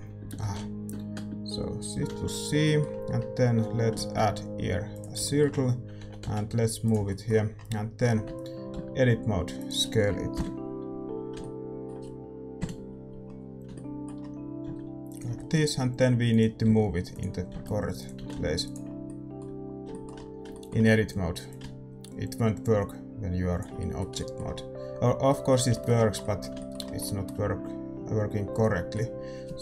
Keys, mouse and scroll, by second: 2.6-4.9 middle drag, 4.9 Tab, 4.9 shift+a, 5.2-9.5 middle drag, 6.0 g, 8.2 Tab, 8.7 s, 10.3 KP_7, 11.0-15.0 middle drag, 12.5 KP_5, 14.6 s, 15.2 g, 16.6 s, 17.5 s, 18.1 g, 18.8-21.5 middle drag, 21.5-23.1 drag, 23.7-29.6 middle drag.